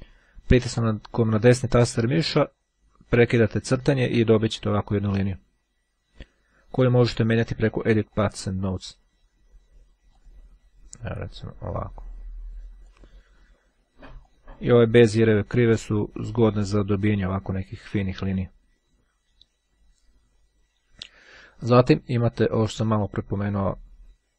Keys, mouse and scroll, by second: 0.6 right click, 7.0-8.8 drag, 10.2 click, 11.5-13.4 drag, 14.4 click, 16.5-18.2 drag.